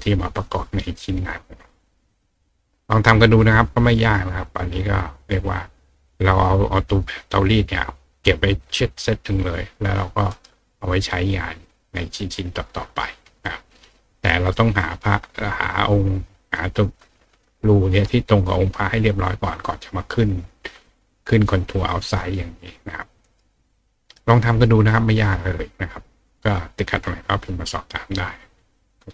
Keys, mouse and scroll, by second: 4.2 click, 10.3 right click, 23.2 right click.